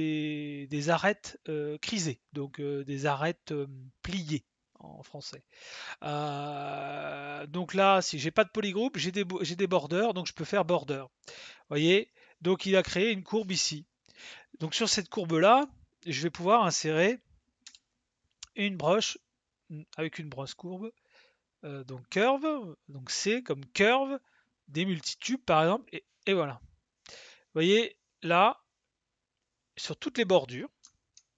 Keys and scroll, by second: 22.1 c.